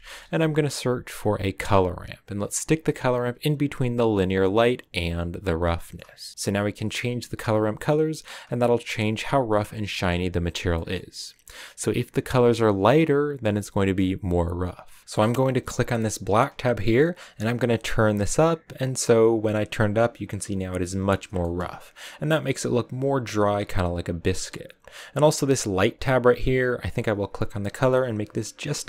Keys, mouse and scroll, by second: 5.4 click, 6.1 click, 21.0-21.3 scroll down 2, 21.3-25.7 shift+middle drag, 25.7-27.9 drag.